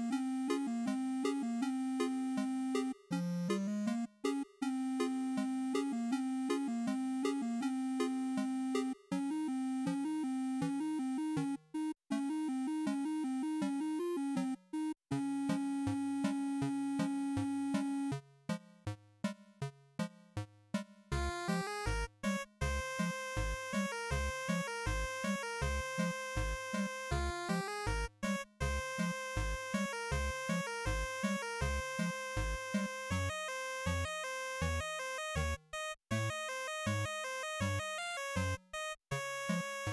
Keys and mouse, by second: 13.3-15.4 drag, 18.5-19.8 drag, 22.0-23.3 drag, 27.1-28.7 drag, 33.2-36.6 drag.